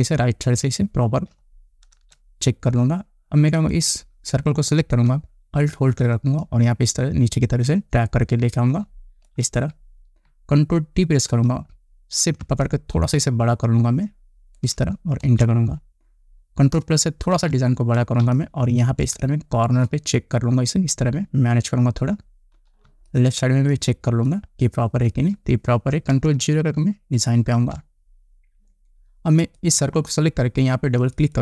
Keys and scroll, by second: 2.4 Return, 11.5 ctrl+t, 15.7 Return, 17.8 ctrl+=, 18.7 space, 23.3 space, 28.0 ctrl+0.